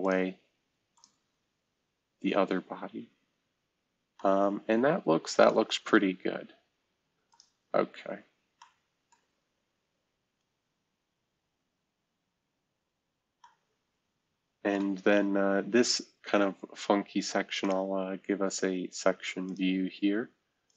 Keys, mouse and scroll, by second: 3.3-4.1 scroll up 2, 5.6-7.2 scroll down 2, 15.0 middle drag, 16.1-17.7 scroll down 2, 19.4 click, 20.6-20.7 drag.